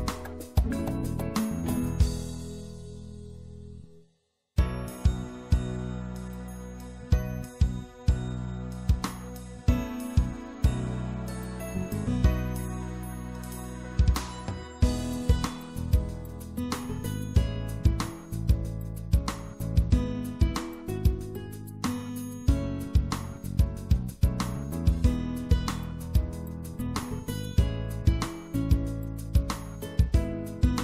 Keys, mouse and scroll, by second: 1.1-2.9 right drag, 2.9 middle click, 3.4-5.1 drag, 5.1 right click, 5.7-13.1 middle drag, 13.1 click, 14.3 middle click, 16.4 middle click, 18.9-20.3 right drag, 20.3-21.4 middle drag, 24.2-27.4 shift+right drag.